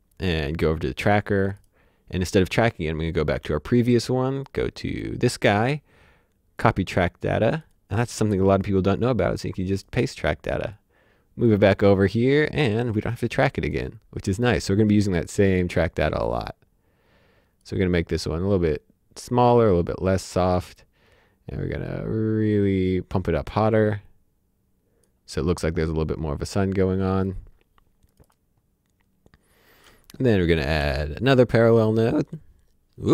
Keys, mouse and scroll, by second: 4.4 click, 6.6 click, 13.1 click, 15.2 click, 26.5 click, 29.7 click, 30.8 p.